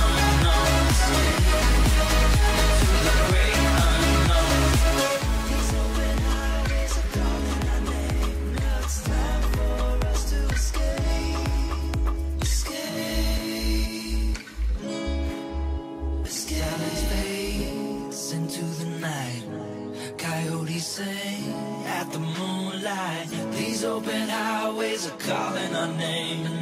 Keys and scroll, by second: 0.1 Return, 0.6 ], 7.3 [, 12.8 [, 18.2 [, 21.0 x, 21.6 [, 24.4 h.